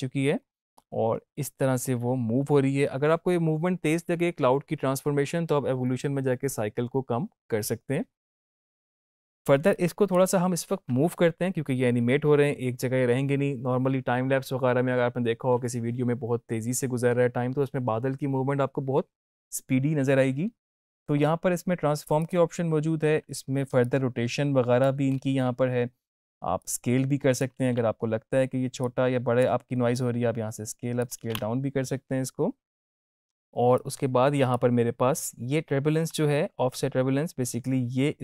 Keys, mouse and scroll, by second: 8.8 space, 9.7-10.2 drag, 22.1-25.0 drag, 25.2 ctrl+z, 26.6-27.5 click, 27.5 ctrl+z, 28.8-29.4 drag, 31.2 ctrl+z, 33.4 ctrl+shift+z, 33.7-34.7 drag, 37.6-38.2 click.